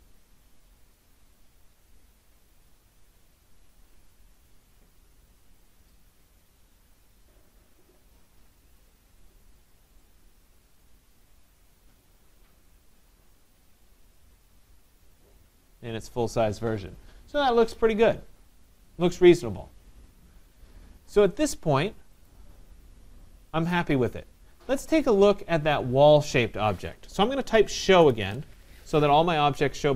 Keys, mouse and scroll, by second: 22.3-27.4 drag, 27.5-28.8 typing, 29.5 middle click, 29.6 middle click, 29.7 middle click.